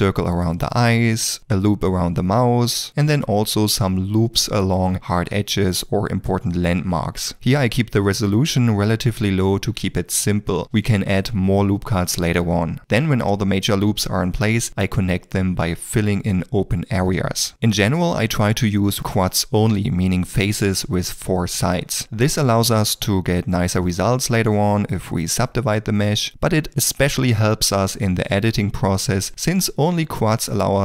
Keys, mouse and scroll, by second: 0.0 click, 0.7 click, 1.3 d, 2.1 shift+middle click, 2.6 g, 4.2 ctrl+middle click, 4.7 alt+a, 5.1 alt+a, 5.3 click, 5.6 click, 5.8 d, 5.9 click, 6.6 2, 6.8 f, 7.2 ctrl+middle click, 7.4 shift+middle click, 8.1 g, 9.0 ctrl+r, 9.5 shift+middle click, 9.9 d, 10.1 click, 10.4 d, 10.6 click, 11.4 click, 11.8 d, 12.0 middle click, 12.1 d, 12.2 shift+middle click, 12.3 d, 12.4 click, 12.8 click, 13.0 click, 13.4 click, 13.7 click, 14.1 click, 14.4 click, 15.7 shift+middle click, 16.7 g, 17.9 KP_1, 18.0 Return, 18.3 g, 19.1 middle click, 19.4 g, 20.5 shift+middle click, 20.6 g, 20.7 f, 21.0 f, 21.2 g, 23.0-25.6 typing, 24.1 shift+click, 24.9 shift+click, 25.2 shift+middle click, 26.7 shift+click, 26.8-29.1 typing, 27.5 shift+middle click, 27.6 middle click, 27.7 shift+middle click, 28.5 middle click, 29.8 ctrl+z, 30.0 middle click, 30.1 ctrl+r.